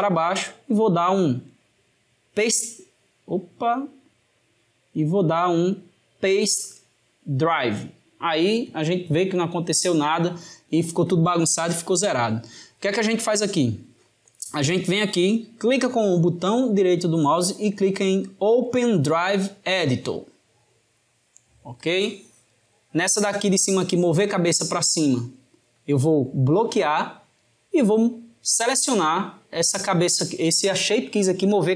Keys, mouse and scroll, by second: 1.3 right click, 4.8-7.8 right drag, 15.9-18.9 right drag.